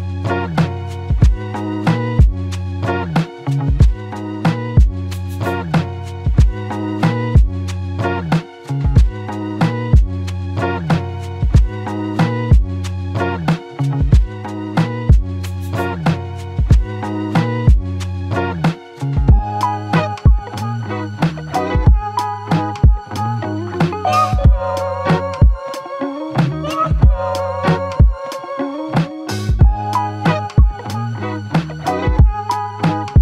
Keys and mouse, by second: 2.4 alt+click, 3.2 alt+click, 4.4 f, 5.5 alt+click, 6.8 shift+click, 8.4 shift+click, 9.0 alt+shift+click, 10.3 shift+click, 12.4 alt+shift+click, 18.8 double click, 21.1 alt+click, 22.8 shift+click, 24.0 shift+click, 26.8 f, 27.6 double click, 29.8 alt+shift+click, 30.3 alt+click, 32.8 alt+click, 33.0 shift+click.